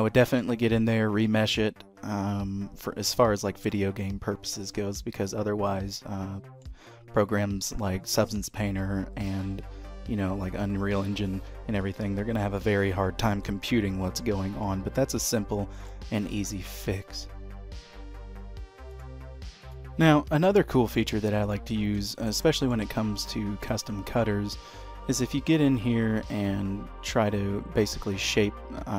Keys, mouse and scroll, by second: 0.3 shift+middle click, 3.9 middle click, 5.8 middle click, 14.8 middle click, 16.3 shift+middle click, 19.7 click, 20.3 middle click, 22.2 shift+middle click, 22.6 middle click, 23.7 click, 24.1-25.3 scroll up 1, 25.3 scroll up 1, 25.4 click.